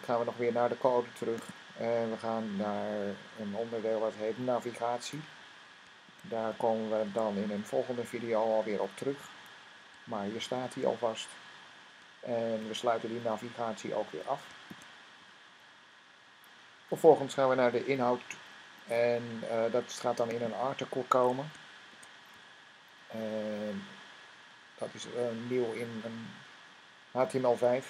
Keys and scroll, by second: 5.7-7.4 typing, 10.4 >, 14.6-15.1 typing, 18.6 Tab, 21.8 <, 22.2 a, 24.4 Down, 25.3 Down, 25.6 Down, 25.8 Down, 25.9 Down, 26.1 Down.